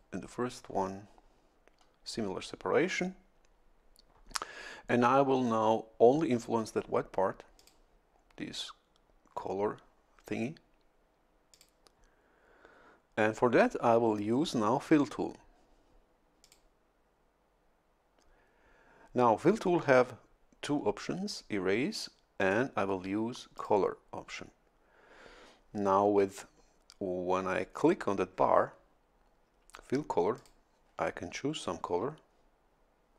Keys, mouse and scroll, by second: 0.2-7.6 middle drag, 7.6 click, 11.5 click, 16.4 click, 22.4 click, 23.5 click, 30.4 click.